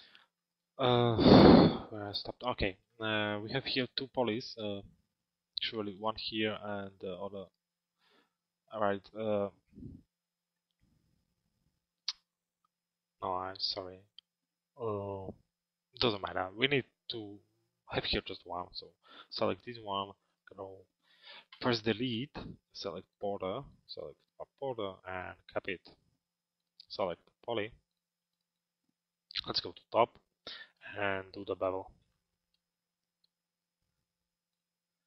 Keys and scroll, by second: 21.2 Delete, 29.2 t.